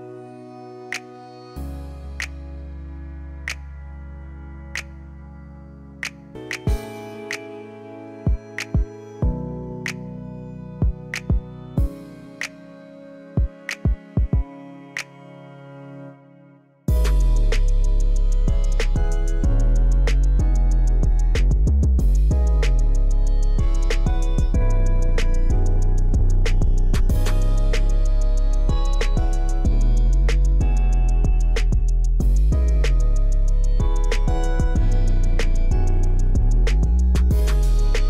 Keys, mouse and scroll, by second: 0.0 scroll up 1, 0.2 shift+middle click, 0.4 scroll down 1, 1.0-2.3 shift+middle drag, 3.4-10.4 shift+drag, 10.8-11.2 shift+scroll down 2, 12.4 shift+click, 16.9 shift+click, 20.7 shift+click, 22.3 shift+click, 25.2 shift+click, 26.6-27.7 shift+middle drag, 28.6 F8, 31.6 middle click, 32.2-33.9 middle drag, 34.3-34.9 scroll up 3, 34.9 shift+middle click, 36.0-37.0 scroll down 4, 37.0 shift+middle click, 37.5-38.0 shift+middle drag.